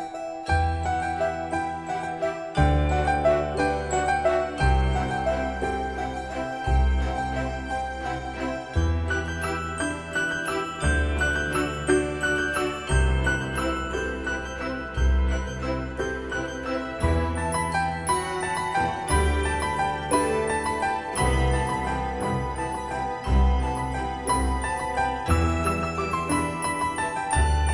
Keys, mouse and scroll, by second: 8.9 middle click, 10.0 scroll up 1, 11.2-11.8 scroll down 1, 11.8-14.7 scroll up 1, 14.7 typing, 17.4-18.4 scroll up 1, 19.1-20.5 scroll up 1, 20.5 typing, 21.5 typing, 23.8 click, 27.4-27.7 scroll down 1.